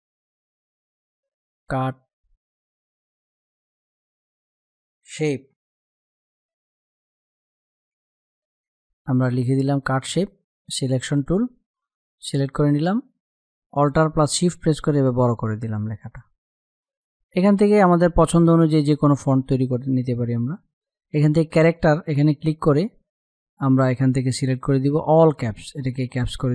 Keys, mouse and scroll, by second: 1.1 shift+c, 2.6-3.6 typing, 4.3 Return, 6.0-8.2 typing, 10.7 click, 13.9-15.3 alt+drag, 15.3-18.3 drag, 21.3 click, 24.7 click.